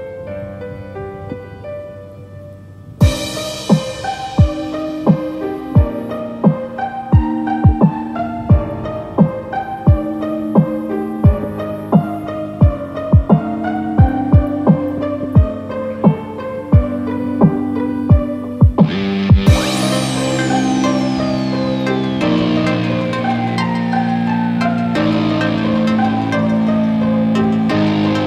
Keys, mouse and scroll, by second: 11.9 scroll down 3, 12.2 middle click, 16.8 click, 16.8-17.7 scroll down 4, 17.7 click, 18.0 click, 18.1 click, 18.8 Tab, 18.9 click, 19.6 click, 21.2 g.